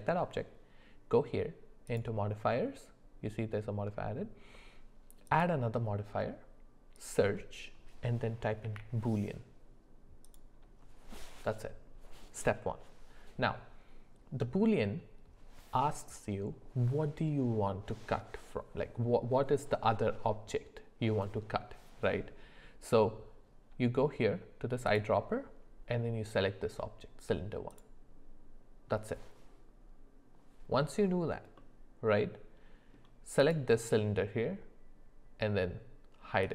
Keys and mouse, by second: 1.8 click, 5.4-10.4 drag, 31.6-32.9 middle drag, 33.4 click, 36.4 click.